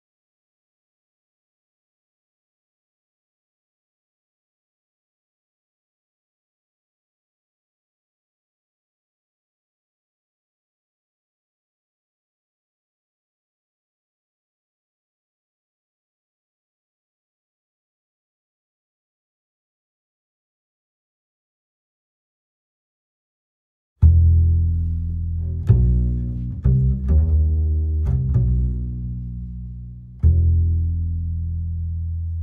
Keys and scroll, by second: 16.3 space, 23.8 ctrl+z.